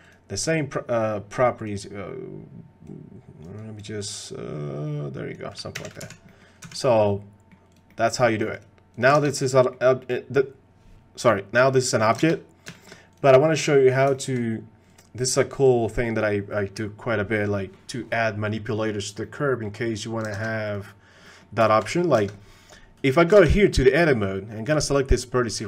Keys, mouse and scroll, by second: 0.0 click, 1.6 click, 2.9 click, 4.0-5.4 drag, 5.7 g, 6.3 middle click, 6.6 x, 7.0-7.5 middle drag, 7.7 click, 7.9-8.4 middle drag, 9.2 ctrl+Tab, 9.6 click, 12.7 shift+click, 13.1 click, 14.1 shift+click, 15.2 click, 15.6 click, 17.5 click, 19.2 click, 20.4 ctrl+Tab, 20.6 click, 21.2 click, 21.6 shift+middle click, 21.9 middle click, 23.1 ctrl+Tab, 23.4 ctrl+Tab, 23.9 middle click, 24.6 click.